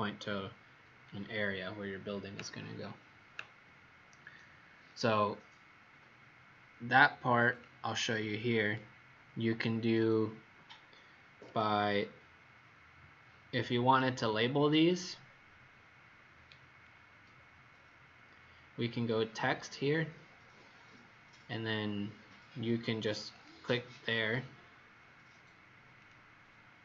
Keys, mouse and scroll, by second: 4.8 click, 11.5-12.0 scroll up 3, 13.8-14.5 scroll down 5, 15.0-15.4 scroll down 2, 16.4-16.8 scroll up 1, 17.7 scroll up 1, 23.3 click.